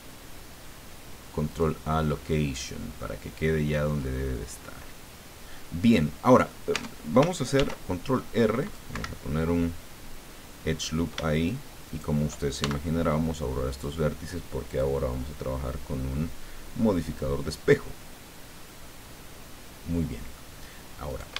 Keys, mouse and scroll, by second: 1.5 click, 2.1 click, 3.1 middle click, 4.0-6.1 middle drag, 6.1 click, 6.7 Tab, 7.5 ctrl+r, 8.5 click, 8.9 Escape, 10.8 right click, 11.8 shift+right click, 12.6 shift+x, 13.7 click, 14.7 click, 17.0 click, 18.7 click, 19.4 middle click, 20.1 middle click, 21.1 shift+right click.